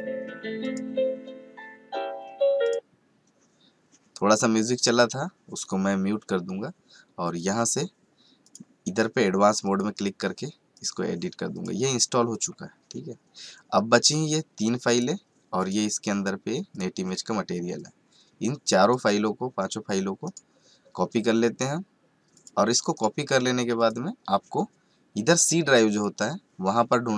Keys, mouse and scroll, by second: 14.1-20.3 drag, 18.0 click, 20.3 right click, 22.3 click, 22.9 right click, 23.8 click.